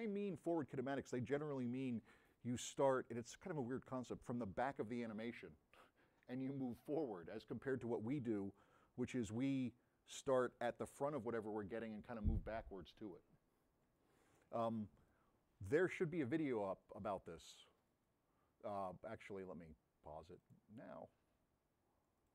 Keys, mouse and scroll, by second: 19.3 click.